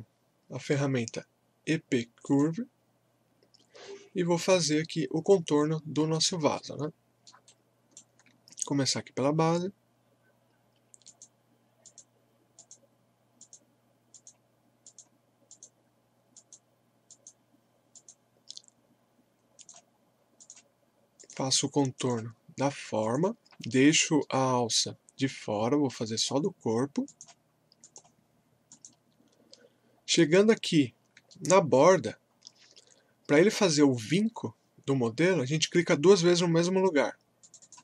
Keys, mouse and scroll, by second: 2.6 click, 5.9 scroll up 1, 6.5 alt+middle click, 7.5-10.4 alt+right drag, 11.0 click, 11.1 click, 23.7-26.1 alt+middle drag, 26.0 click, 26.1 click, 31.3 alt+middle click, 32.1-32.4 scroll up 1, 37.4 click.